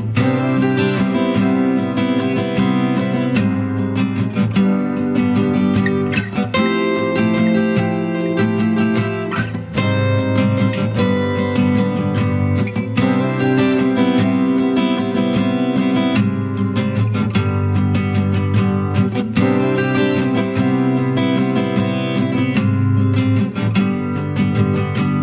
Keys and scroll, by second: 2.9 ctrl+l, 21.1 ctrl+j.